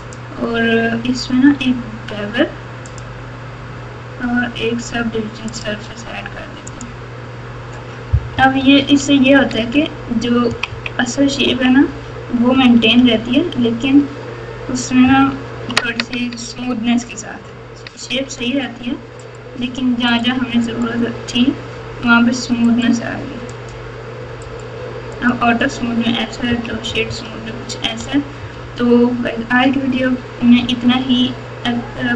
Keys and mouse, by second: 0.0-3.0 drag, 5.5-6.9 drag, 8.3-11.4 typing, 12.5-13.9 typing, 15.0 KP_6, 15.5 KP_6, 15.6 KP_6, 15.6 KP_6, 20.1 click, 20.7-21.7 right drag, 22.6-23.7 right drag, 24.5-25.4 right drag, 26.4-32.1 typing.